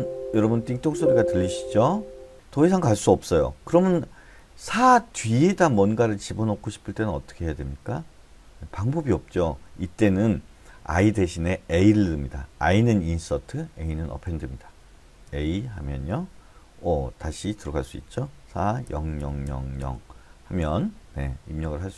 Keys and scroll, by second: 0.8 l, 15.2 a, 18.8 0, 19.2 0, 19.4 0, 19.8 0.